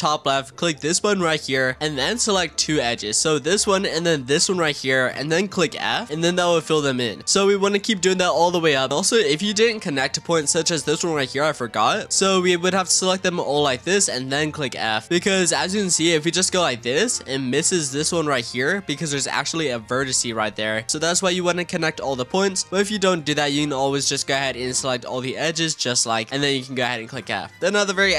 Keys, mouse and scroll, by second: 0.1-0.7 scroll up 1, 0.7-3.0 drag, 4.1 shift+click, 5.7 f, 6.0-8.6 shift+middle drag, 8.9 click, 10.3-12.0 drag, 12.5 shift+click, 13.0 shift+click, 13.4 shift+click, 13.9 shift+click, 15.0 click, 15.6 click, 16.2 shift+click, 16.5 f, 16.9-17.3 scroll up 2, 17.3 shift+middle click, 17.7-20.5 scroll up 2, 20.5 click, 20.8 scroll up 2, 20.9 ctrl+z, 21.6 shift+middle click, 22.4 ctrl+z, 22.7 ctrl+z, 23.0-24.1 drag, 24.6 shift+click, 25.0 shift+click, 25.7 shift+click, 26.1 shift+click, 26.8 f, 27.1 click, 27.8 click.